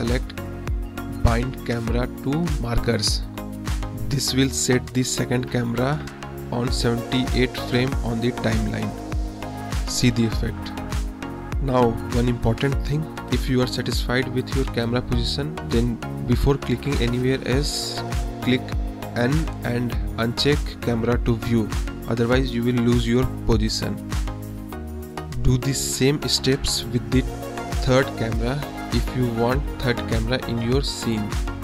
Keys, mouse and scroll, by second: 0.9 space, 1.1 space, 1.5 click, 1.6 space, 4.4 space, 5.1-6.1 drag, 6.1 middle click, 7.3 shift+click, 8.0 click, 9.6 space, 10.5 space, 11.2 click, 11.4 space, 13.0 space, 13.6 click, 15.1 click, 16.4 n, 17.2 click, 17.6 n, 17.9 click, 18.4 drag, 18.6 middle click, 19.1-20.4 middle drag, 20.4 scroll up 1, 21.1 KP_0, 21.4 KP_0, 21.7-22.5 middle drag, 22.9-23.3 middle drag, 23.5-24.4 middle drag, 24.6 middle drag, 25.2-25.8 middle drag, 26.5 shift+a, 28.1 click, 29.0 KP_0, 30.3-31.5 drag.